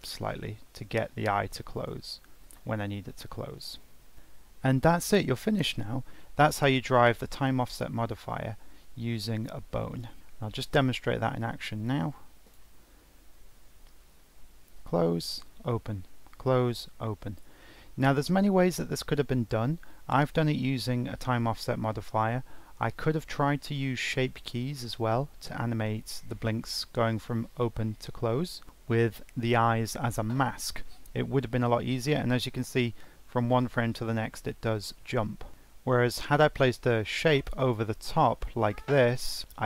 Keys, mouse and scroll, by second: 3.8-4.1 drag, 6.1-8.2 shift+middle drag, 8.2 click, 9.3-10.7 drag, 10.7 ctrl+Tab, 12.5-13.6 drag, 13.6 g, 36.9-38.0 drag, 38.0 ctrl+z, 38.4-39.6 drag.